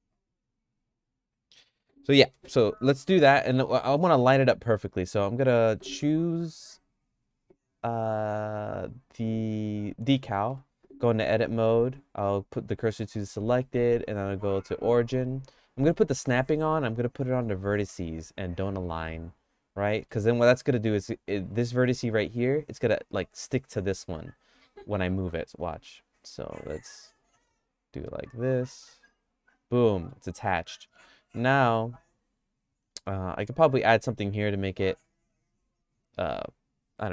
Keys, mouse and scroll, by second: 3.3 middle click, 3.7 shift+middle click, 4.5 middle click, 5.5 Tab, 8.3 Tab, 8.5 click, 10.2 middle click, 10.5 Tab, 11.9 q, 12.7 Tab, 13.2 q, 15.9 click, 16.4-18.9 drag, 20.0 middle click, 21.5 Tab, 24.5 Tab, 24.8 click, 27.1-28.2 drag, 28.7 g, 29.9 middle click, 31.0 middle click, 31.7-34.0 shift+middle drag.